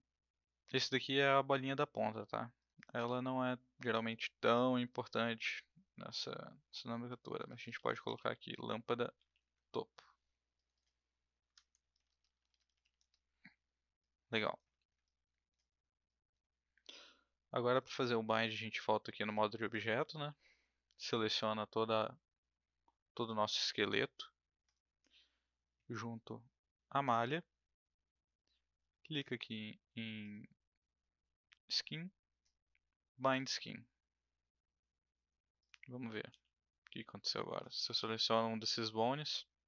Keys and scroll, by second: 7.2-9.7 typing, 11.4 Right, 11.7-13.3 typing, 36.3 e.